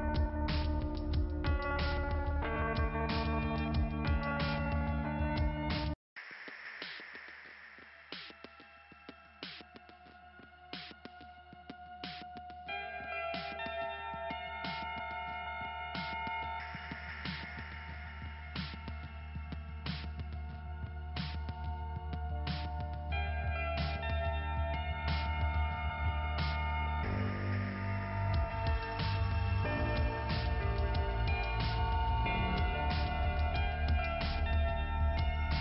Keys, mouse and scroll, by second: 1.1 middle click, 1.7 scroll down 1, 1.9 scroll up 1, 3.7 middle click, 4.4 middle click, 5.4 scroll up 1, 5.7 scroll down 1, 8.0 middle click, 10.5 scroll down 2, 12.7 click, 13.3 click, 16.1 middle click, 17.6 click, 21.1 click, 22.0 scroll up 2, 23.6 click, 30.1 click, 30.5 click, 30.8 click, 32.3 click, 33.2 click, 35.1 click.